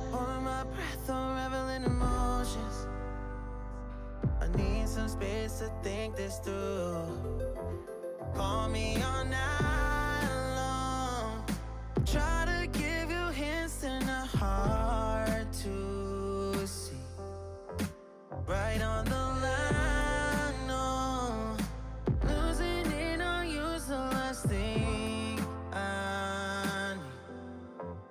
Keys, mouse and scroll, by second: 0.0 alt+z, 0.3 click, 0.9 2, 1.1 1, 1.3 click, 1.9 alt+z, 2.3 x, 3.1 click, 3.3 middle drag, 3.5 Tab, 3.6 click, 3.8-5.6 middle drag, 5.6 click, 6.2-6.8 shift+middle drag, 6.8-8.2 scroll up 1, 8.7-9.7 drag, 10.3 click, 11.3 Tab, 11.4 drag, 11.8 alt+z, 11.9 middle click, 12.2-12.6 scroll down 1, 12.6-13.2 drag, 13.2 ctrl+l, 13.7 p, 14.1 Tab, 14.5 Tab, 14.8 click, 15.2 drag, 16.1 p, 17.1-17.9 drag, 17.9 p, 18.4 click, 18.5 Tab, 18.8 click, 19.2 Tab, 19.4 Tab, 19.6 click, 19.9 Tab, 20.5-21.2 drag, 21.2 p, 21.9 click, 22.7 p, 23.3-23.8 drag, 23.8 p, 24.4 click, 24.7 Tab, 25.8 KP_3, 26.1 click, 26.3 shift+middle click, 26.4 scroll up 3, 26.7 click, 26.8 middle click, 27.4 KP_3, 27.7 Tab, 27.9 shift+middle click, 28.0-28.1 scroll up 6.